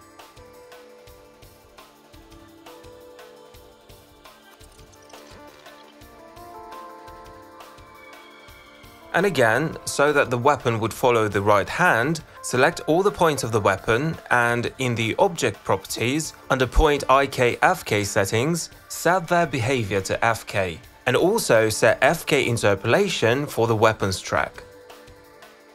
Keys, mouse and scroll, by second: 0.4 click, 0.7 click, 0.8 click, 1.2 q, 1.5 middle click, 2.0 e, 2.3 ctrl+v, 4.2 click, 7.2 alt+click, 12.8-13.8 drag, 14.0-15.0 drag, 15.3-16.5 drag, 16.6-19.3 drag, 19.9-22.7 drag, 24.3 click.